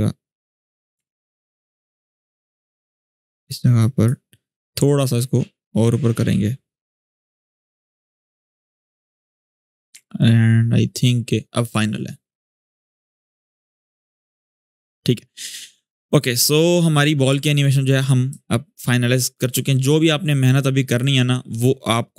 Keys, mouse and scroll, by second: 0.9 alt+scroll up 1, 1.5 ctrl+z, 2.7-7.7 drag, 7.7 space, 9.7 alt+scroll down 1, 16.1 click, 17.1-17.7 alt+scroll down 2, 18.0-19.3 shift+drag.